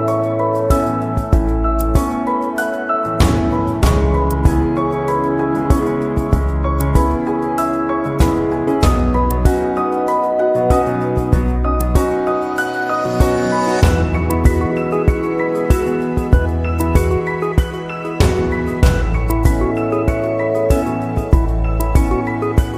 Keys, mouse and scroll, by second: 20.9 click.